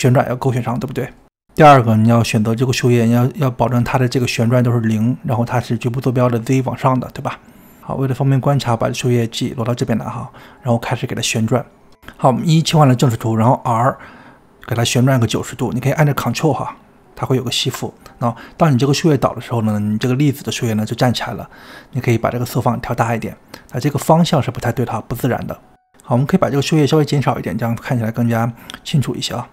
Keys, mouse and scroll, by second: 2.6 click, 5.6 click, 8.1 click, 8.5 g, 10.6 KP_1, 12.3 r, 13.8 r, 18.0 middle click, 18.5-18.8 scroll up 3, 18.8 click, 19.3-21.9 middle drag, 21.9-23.2 drag, 23.2-24.1 scroll down 3, 24.1 click, 25.2 click, 25.6-26.9 middle drag, 26.9-28.5 drag, 29.4 middle click.